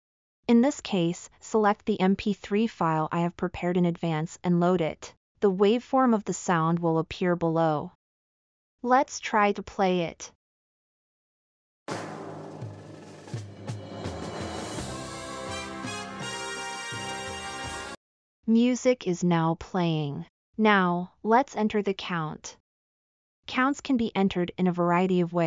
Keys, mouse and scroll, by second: 7.3-7.7 drag, 13.5 click, 13.5 right click.